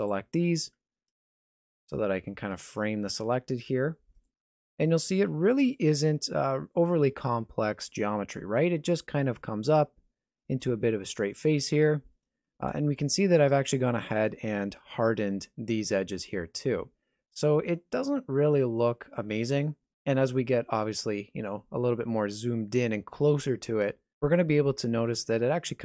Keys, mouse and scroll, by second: 1.1 KP_Decimal, 2.0 alt+a, 2.3-2.8 scroll down 3, 3.1 shift+middle click, 4.4 middle click, 5.1 shift+middle click, 8.6 middle click, 12.5 scroll up 1, 12.8 shift+middle click, 13.6 scroll up 1, 13.9 Tab.